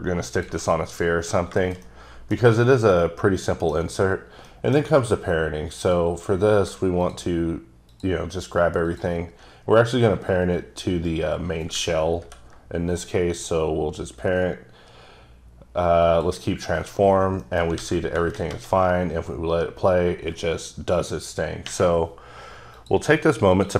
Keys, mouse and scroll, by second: 0.3 click, 0.7 scroll down 2, 1.0 middle click, 1.3 scroll down 2, 1.6 shift+middle click, 1.9 shift+double middle click, 3.0 middle click, 4.1 scroll up 1, 4.5 middle click, 5.8 click, 7.9 shift+double click, 8.9 shift+click, 12.3 ctrl+p, 16.1 click, 17.0 scroll down 3, 17.4 middle click, 17.8 a, 18.4-21.1 shift+middle drag, 21.7-22.8 middle drag, 22.8 click, 23.6 click.